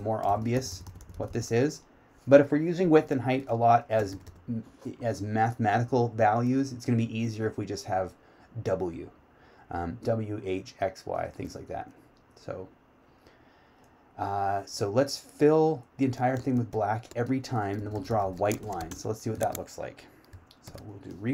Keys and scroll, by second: 18.1 q.